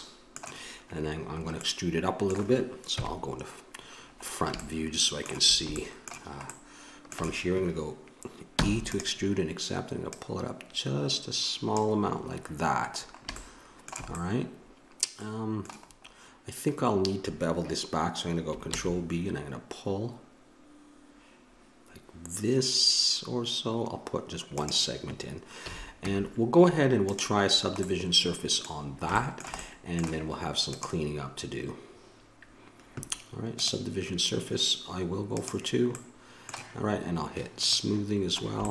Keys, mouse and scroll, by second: 2.9 KP_1, 8.5 e, 10.0-11.9 drag, 12.2-14.2 middle drag, 18.7 ctrl+b, 25.7 a, 26.1 Tab, 27.4 middle click, 30.7-32.2 middle drag, 32.2 click, 35.4 click, 35.9-37.2 middle drag, 37.6-38.7 drag.